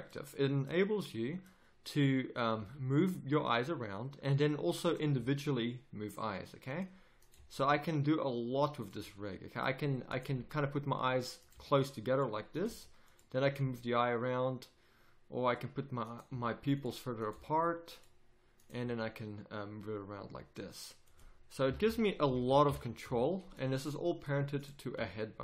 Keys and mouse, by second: 2.6 g, 4.8-7.2 drag, 5.1 g, 7.3 g, 9.4-11.5 drag, 10.3 g, 11.5 g, 12.6 g, 13.6 g, 16.2 g, 17.3 g, 18.8 g, 19.6 click, 21.6 a, 21.8 a, 22.4 alt+g, 22.6 alt+r, 23.0 a, 24.6-25.4 drag, 24.9 r.